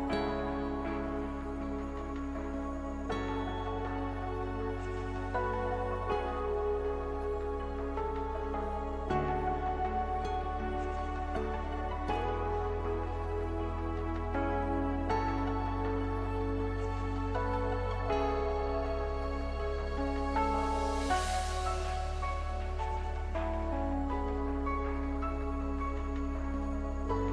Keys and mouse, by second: 1.4 middle click, 2.1 Tab, 3.3 w, 5.3 w, 6.7 w, 14.7 w, 18.5 w, 19.6 w.